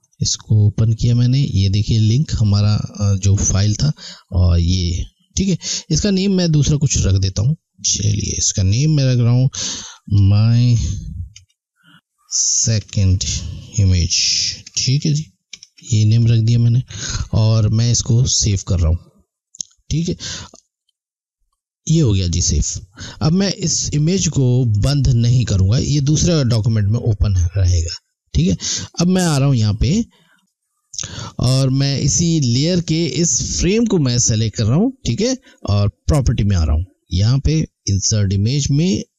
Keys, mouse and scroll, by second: 3.1 click, 6.0 click, 10.2-11.3 typing, 13.1 space, 14.4-15.5 typing, 18.3 click, 28.9 click, 33.6 click, 38.6 click.